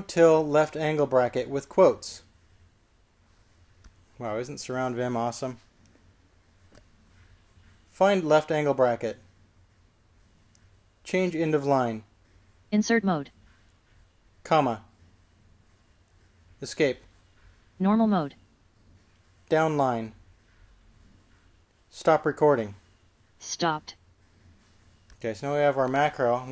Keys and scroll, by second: 3.0 typing, 9.7-10.4 typing, 12.5-13.2 typing, 15.9 ,, 17.8 Escape, 23.5 q.